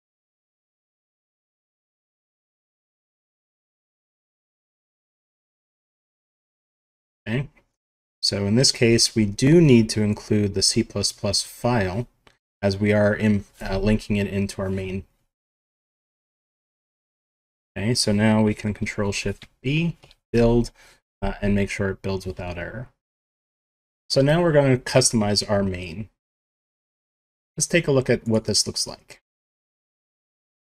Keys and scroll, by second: 0.4 Home, 0.9 ctrl+Right, 1.3 ctrl+Left, 1.9 Left, 2.2 ctrl+shift+Right, 3.4 ctrl+shift+Right, 3.9 ctrl+shift+Left, 4.4 Delete, 5.0 Tab, 8.7 Right, 11.2 End, 15.8 ctrl+s, 18.9 ctrl+shift+b.